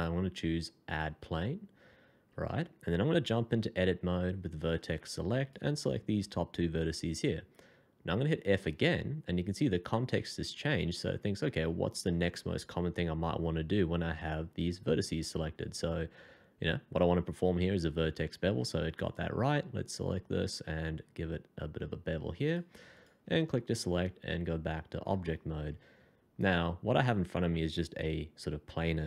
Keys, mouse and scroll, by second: 2.0 scroll down 1, 2.5 shift+middle click, 4.5 1, 8.6 f, 20.7 alt+scroll up 1, 22.9 double click, 23.8 Escape, 24.3 middle click.